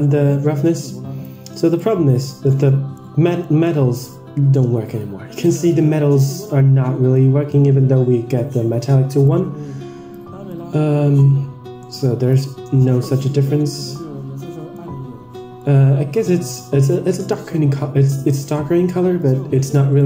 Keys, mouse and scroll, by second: 1.1-1.8 drag, 2.9-3.4 middle drag, 3.4 scroll down 3, 3.6-4.1 middle drag, 4.1-4.8 scroll up 4, 4.5 middle click, 5.5 middle click, 6.2 middle click, 6.7-7.2 scroll up 4, 7.2-8.0 middle drag, 9.1-10.0 drag, 10.4-12.3 drag, 12.5-13.1 scroll down 3, 12.7-13.1 middle drag, 13.8-14.7 middle drag, 14.9-15.2 scroll up 2, 15.3 scroll down 1, 15.6-16.3 middle drag, 15.6-16.0 scroll down 1, 17.1 click, 17.9 Tab, 18.5 Tab, 18.8 middle click, 19.5 Tab, 19.9 middle drag.